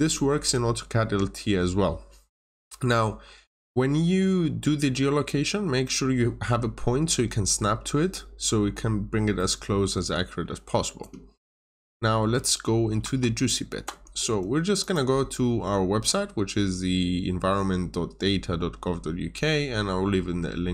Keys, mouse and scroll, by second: 2.8 scroll up 1, 3.7 middle click, 7.5 scroll down 1, 9.3 middle click, 12.9 alt+Tab, 14.7 click.